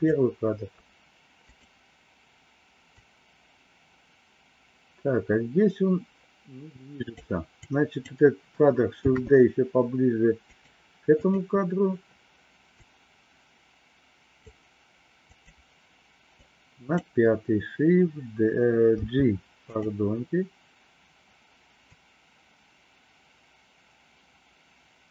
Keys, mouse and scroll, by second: 1.4 click, 2.9-7.2 drag, 7.6 click, 9.0 shift+d, 11.1 click, 12.8-14.5 drag, 15.2 click, 16.3 click, 18.9 g, 21.9-25.1 drag.